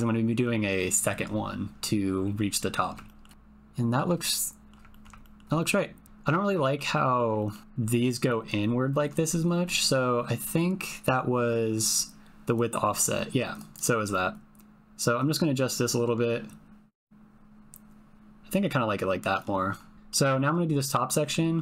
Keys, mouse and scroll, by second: 3.1 shift+middle click, 3.3 shift+middle click, 4.3 middle click, 4.9 ctrl+middle click, 5.2 shift+middle click, 5.7 middle click, 5.9 click, 6.6 shift+click, 6.9 click, 7.3 ctrl+click, 12.6-13.6 drag, 13.6 middle click, 14.4-19.4 drag, 19.9 middle click, 21.0 middle click, 21.2 alt+click.